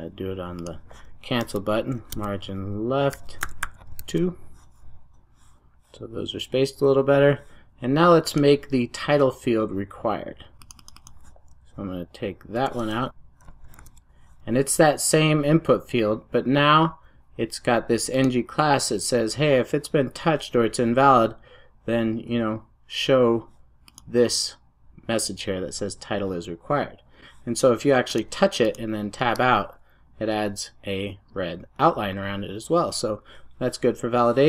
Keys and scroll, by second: 3.9 super+s.